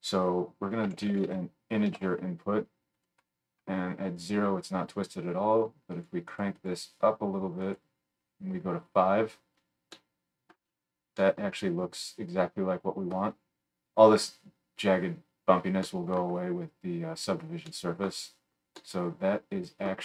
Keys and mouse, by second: 18.9-20.0 middle drag.